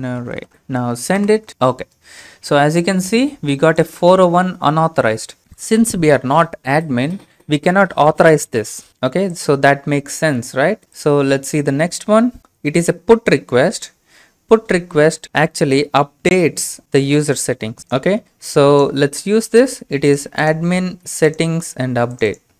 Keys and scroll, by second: 1.9-2.7 typing.